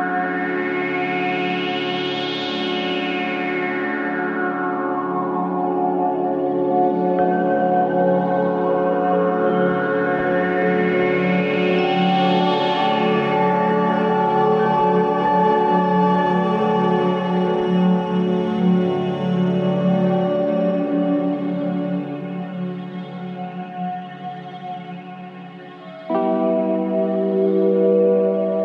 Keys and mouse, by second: 7.0 ctrl+r, 16.6-19.0 middle drag, 23.1-28.2 middle drag.